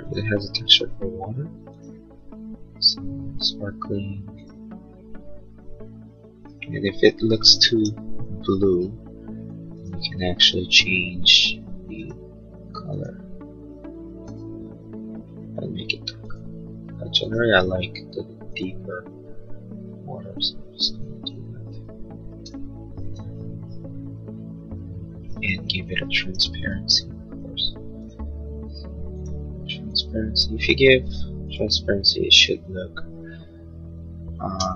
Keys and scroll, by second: 21.6 space, 25.6 b, 33.1 space, 34.6 Escape.